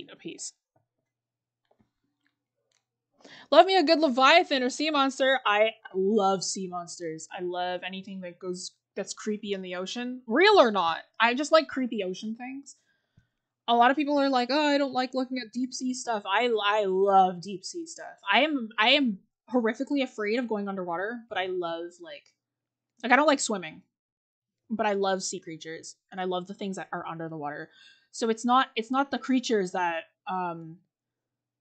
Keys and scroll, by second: 3.2-3.8 scroll down 1, 3.8-5.2 scroll up 1, 9.4-9.9 scroll down 1.